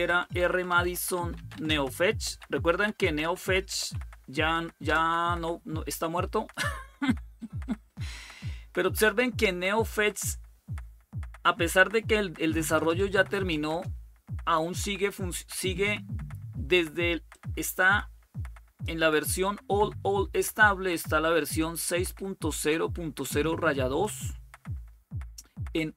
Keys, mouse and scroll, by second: 0.0-4.6 typing, 12.5 Return, 12.8 typing, 13.1 Return, 13.4 Return, 13.6 Return, 17.1-18.8 drag, 21.5 click.